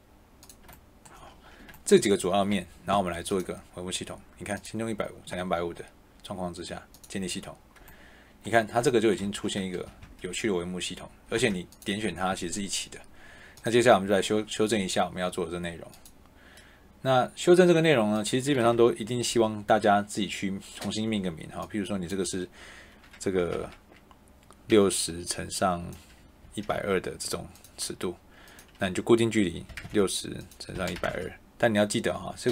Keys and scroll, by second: 9.1 Escape, 11.2 Tab, 18.6 BackSpace, 23.3 BackSpace, 24.6 6, 26.3 1, 26.6 2, 29.6-31.0 typing.